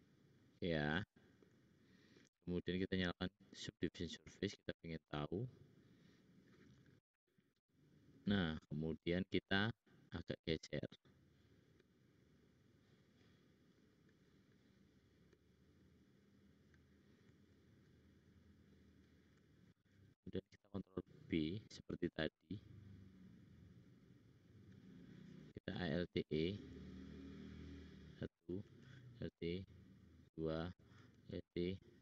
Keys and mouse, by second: 3.2 middle click, 4.0 middle click, 8.2 click, 9.2 click, 10.2 click, 10.2 middle click, 10.2 right click, 13.5 click, 14.4 click, 17.5 shift+click, 17.7 shift+click, 20.2 ctrl+b, 25.6 alt+e, 28.4 alt+click, 28.5 alt+e, 31.1 alt+e.